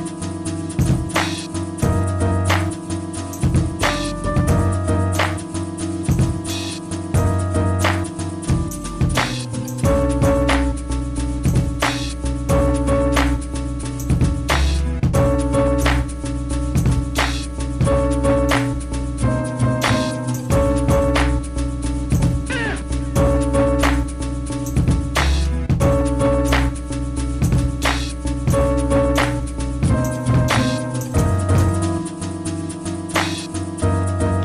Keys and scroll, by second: 4.4-6.2 typing, 22.7 d, 23.1 d, 24.7 d, 25.1 d, 25.6 d, 27.3 d, 28.5 d, 29.1 d, 31.8 Escape, 32.0 Escape, 32.4 i.